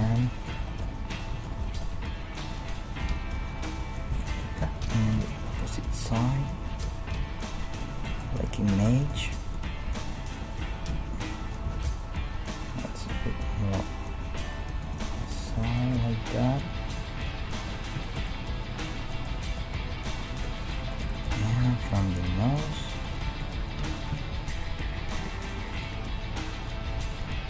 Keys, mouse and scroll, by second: 0.0 ctrl+Tab, 1.9 g, 3.1 KP_3, 8.0-11.0 middle drag, 9.5-11.1 drag, 10.9 l, 11.1 right click, 11.6 g, 15.2-17.7 middle drag, 18.1-19.1 middle drag, 20.3 a, 21.6 ctrl+Tab, 23.1-25.2 right drag, 23.8 g, 25.8-27.4 right drag.